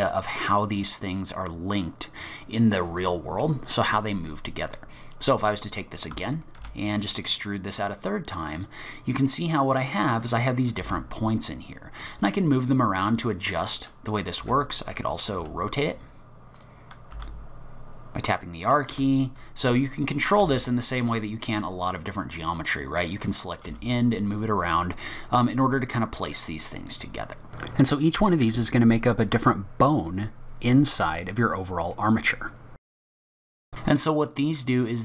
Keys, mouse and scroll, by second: 2.9 click, 4.3-4.7 scroll down 2, 6.1 d, 6.6 e, 10.3 click, 10.8 g, 14.4 q, 17.1 r, 19.8 click, 20.4 g, 23.0 click, 23.7 g, 27.6 middle click, 28.5 middle click, 33.5 scroll up 1, 33.7 middle click, 33.7-34.8 scroll down 1.